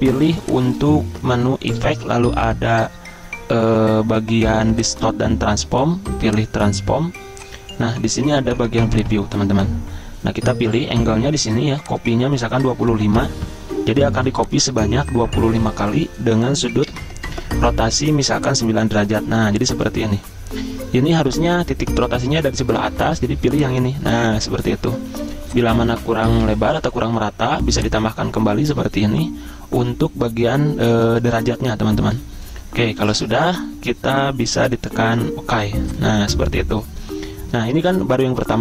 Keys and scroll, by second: 12.5-13.3 typing, 17.0 9, 26.0-26.9 typing, 28.8-29.5 typing.